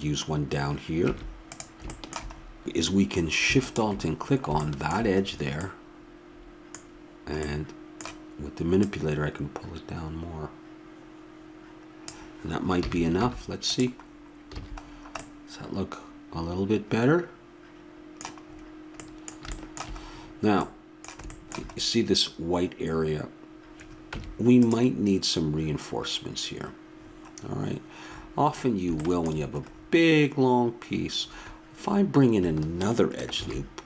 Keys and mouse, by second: 1.1 Tab, 3.6-5.5 drag, 5.5-7.9 middle drag, 8.8-10.6 drag, 12.8 a, 13.2 Tab, 14.5 a, 24.1 Tab, 33.4 ctrl+r.